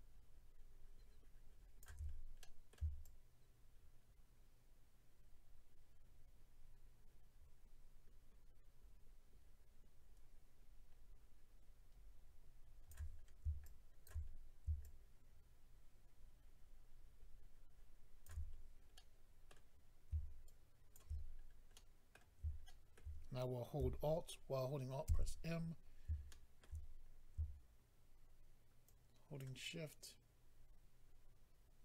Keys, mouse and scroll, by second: 2.1-2.4 scroll down 3, 2.4 middle click, 4.2 shift+click, 13.6 shift+click, 14.2-14.8 scroll up 3, 14.8 shift+click, 18.5-18.9 scroll down 2, 18.9 middle click, 19.8-20.4 scroll up 2, 20.4 shift+click, 21.7 middle click, 21.7-22.1 scroll down 1, 22.6 shift+middle click, 22.9 middle click, 25.0 alt+m, 25.6-26.2 scroll up 1, 26.2 scroll up 1, 26.3 shift+middle click, 26.9 scroll up 1, 28.9 shift+click, 29.6 shift+click.